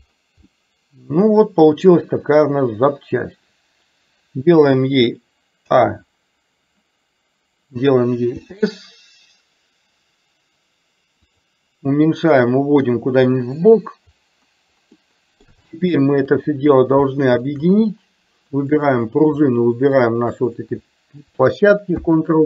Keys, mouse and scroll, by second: 0.6-3.1 middle drag, 5.7 a, 8.4 s, 12.6-13.7 drag, 15.1-15.6 middle drag, 15.8-16.2 shift+middle drag, 17.2 shift+middle click, 18.9 click, 19.9 shift+click, 21.9 ctrl+p.